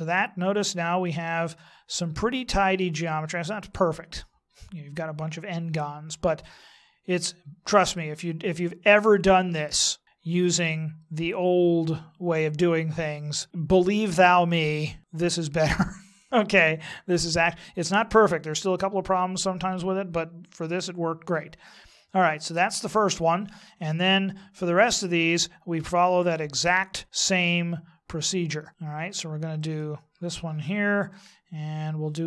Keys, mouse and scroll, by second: 29.6 right click, 31.1 middle click.